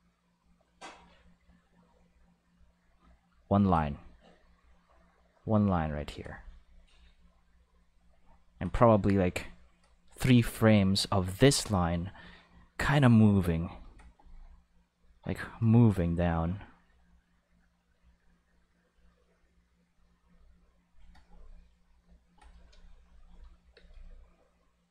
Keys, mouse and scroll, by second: 2.2 click, 5.3 click, 7.2-7.8 drag, 12.1 click, 14.8 click, 18.8 click, 20.1 click, 21.7 click, 23.0 click, 23.2 space, 23.7 space, 23.8-24.9 drag.